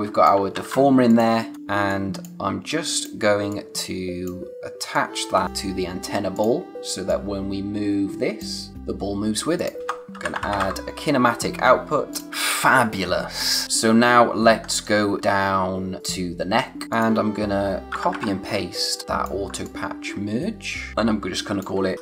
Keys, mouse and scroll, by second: 0.6 ctrl+z, 1.1 click, 1.5 space, 1.9 click, 9.6 click, 9.8 Return, 9.9-11.1 typing, 12.1 click, 12.3 space, 13.6 scroll up 1, 14.5-15.1 scroll down 1, 15.1-16.0 scroll up 1, 16.0 click, 16.9 click, 17.9 ctrl+c, 18.1 ctrl+v, 18.8 click, 19.6 click, 21.7-22.0 typing.